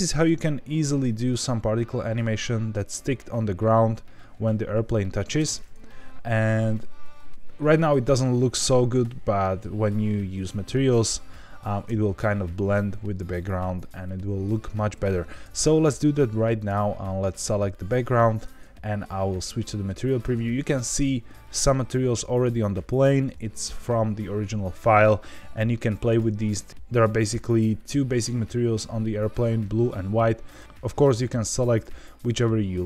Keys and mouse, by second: 2.1-2.7 middle drag, 5.3 space, 8.5 space, 9.3-9.7 middle drag, 11.7 space, 16.5 click, 18.5 z, 20.4 middle click, 21.4 shift+middle click, 26.1 click, 30.4 click, 31.7 click, 32.2 click.